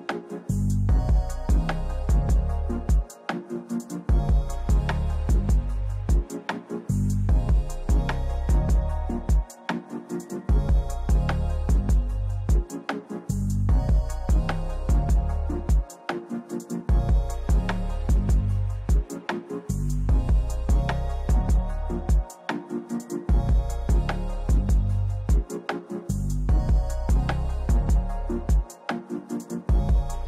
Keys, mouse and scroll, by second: 1.0 click, 1.7 click, 1.9-4.2 typing, 5.2-6.8 typing, 6.0-7.1 drag, 7.4 click, 7.7 click, 8.5 click, 8.6 click, 9.0 Down, 9.3 Down, 9.4 Left, 9.7 right click, 10.3 click, 10.4-11.3 typing, 12.8 typing, 12.8 Return, 14.2-16.7 typing, 17.2 right click, 20.9 click, 21.4 click, 22.7 click, 22.9 middle click, 22.9 middle click, 23.0 middle click, 23.1-23.9 scroll, 24.8 click, 25.5-26.3 scroll, 26.6 click, 26.8-30.2 typing, 27.1-30.2 Return, 27.3 click, 28.1 click.